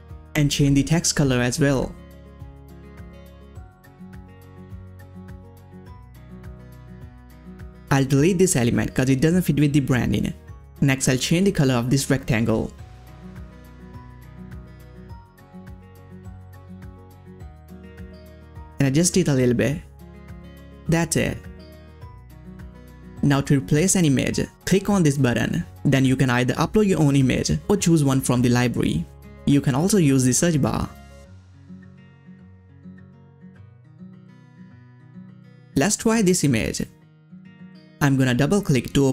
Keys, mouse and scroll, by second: 0.1 click, 2.0 ctrl+c, 3.1 click, 5.1 Return, 6.4 click, 8.2 click, 8.2 click, 10.6 click, 10.6 click, 11.8 click, 11.8 click, 16.3 click, 16.6-17.1 ctrl+scroll up 1, 18.2 click, 18.9-20.6 drag, 20.6 ctrl+scroll down 1, 21.7-22.2 ctrl+scroll up 1, 22.7 click, 23.5 click, 23.5 click, 24.9 click, 29.6 click, 29.6 click, 29.7-31.5 typing, 32.0-35.0 scroll down 1, 35.9 scroll up 1, 35.9 click, 37.7 click, 37.7 click.